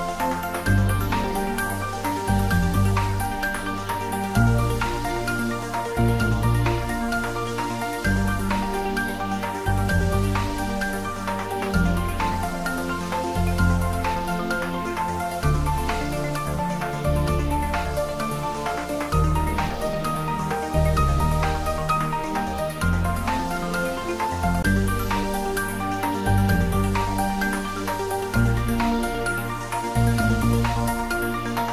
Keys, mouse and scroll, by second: 2.9 click, 5.8 click, 6.2 shift+d, 6.7 r, 12.1 click, 12.7 ctrl+z, 14.5-16.1 typing, 16.8 click, 17.9 g, 21.2 click, 23.1 g, 26.9 click, 28.4 s, 29.2 x.